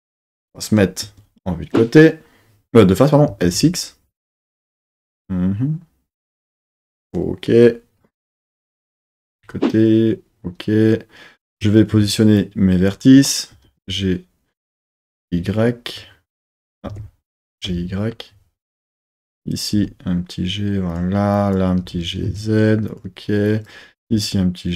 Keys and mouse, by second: 1.0 KP_1, 3.3 s, 3.5 x, 6.7 click, 9.3 KP_3, 11.5 Tab, 11.9 1, 12.4 click, 13.6 g, 13.8 g, 15.1 y, 16.6 click, 17.0 super+z, 17.4 g, 17.7 y, 18.6 click, 19.1 click, 19.7 g, 20.9 click, 21.4 click, 21.8 g, 22.3 a, 22.9 click, 24.1 g.